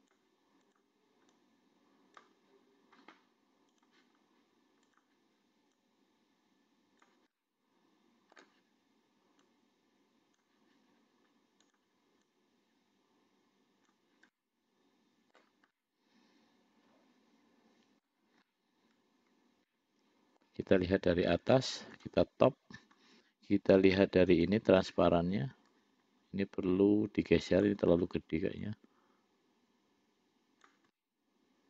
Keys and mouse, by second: 0.9 click, 1.6 click, 4.0 click, 5.1 click, 6.1-7.4 drag, 7.6-8.7 middle drag, 9.7-10.7 drag, 11.9 click, 12.6-14.3 drag, 14.6-15.7 middle drag, 16.1-18.3 middle drag, 18.7-20.8 middle drag, 24.7 click, 26.0-28.0 drag, 29.0-31.0 drag, 31.2-31.6 middle drag.